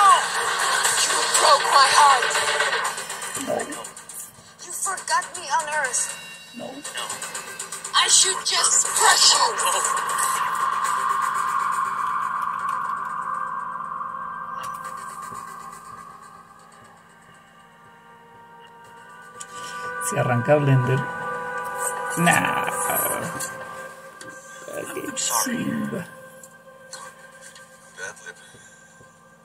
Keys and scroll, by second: 8.6 super+7, 10.5 super+d, 11.9-13.6 typing, 14.6 Return.